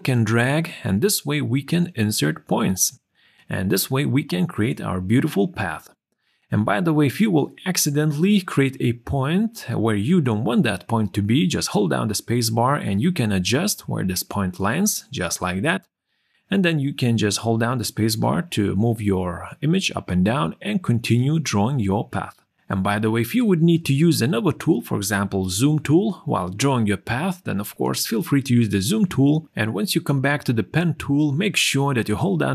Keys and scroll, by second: 12.6 space, 24.5 space, 25.1 z, 26.5 p.